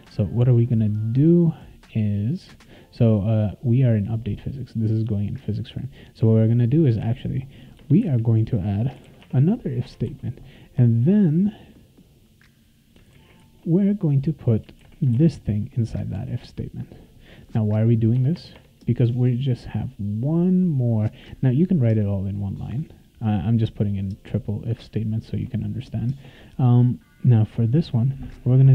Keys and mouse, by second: 0.5 click, 2.4 click, 6.4 click, 7.8 Return, 8.7-9.5 typing, 10.1 ctrl+s, 11.8-12.9 drag, 13.1 ctrl+c, 13.4 ctrl+x, 14.0 click, 14.5 click, 14.8 ctrl+v, 15.1 ctrl+s, 16.4 click, 17.8 click, 18.1 BackSpace, 18.3 BackSpace, 18.5 BackSpace, 19.0 BackSpace, 19.9 click, 20.1 click.